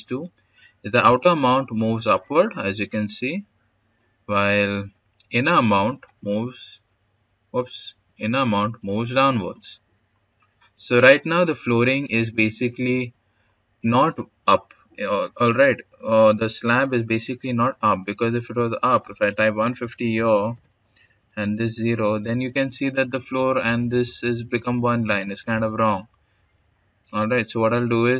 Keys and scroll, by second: 19.2-20.5 typing, 24.5-25.2 typing.